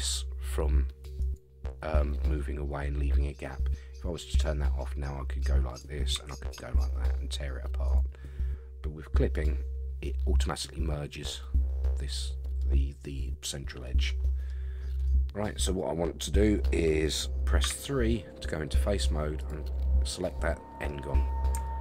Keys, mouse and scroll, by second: 4.3 click, 5.7 click, 6.1 g, 9.3 click, 11.8 middle click, 13.8 scroll down 1, 13.8 middle click, 14.5 scroll up 4, 15.0 scroll down 3, 15.4-16.7 middle drag, 17.6 3, 19.4 click, 20.1 scroll down 1, 20.2 middle click, 21.6 shift+middle click.